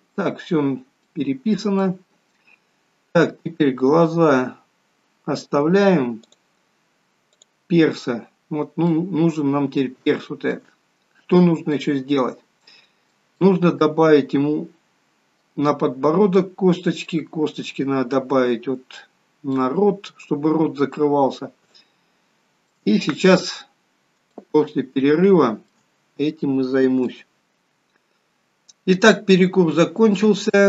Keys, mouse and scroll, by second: 0.9-1.5 scroll up 3, 1.4 middle click, 6.6 click, 7.7 click, 8.7 scroll down 2, 9.1 middle click, 10.4 shift+middle click, 11.4 scroll up 2, 12.0 middle click, 13.7 middle click, 16.7 middle click, 19.9 middle click, 21.9 shift+middle click, 23.2-23.7 scroll down 2, 24.6 shift+middle click, 24.6 scroll down 1, 26.3-26.7 scroll down 1, 27.3 shift+middle click, 28.7 middle click, 30.0 scroll up 2.